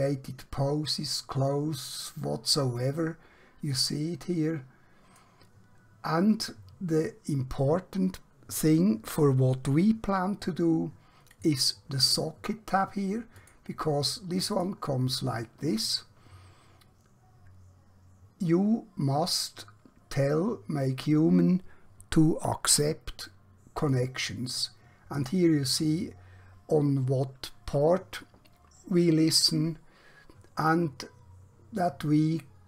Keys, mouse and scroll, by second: 3.7-5.1 click, 11.3 click, 23.7 click.